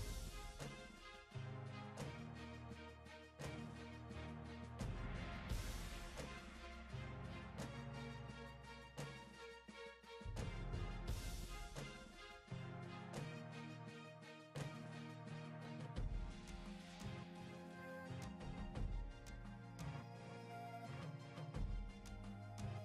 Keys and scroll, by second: 2.0 w, 2.5 w, 3.0 w, 5.3 w, 5.7 w, 7.5 w, 8.5 w, 8.9 w.